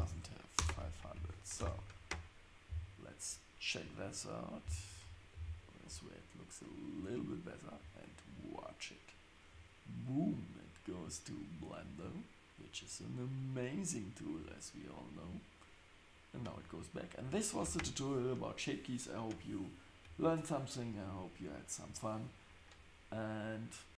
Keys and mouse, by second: 0.0 KP_0, 1.1 shift+Left, 1.6 space, 2.7 click, 4.7 click.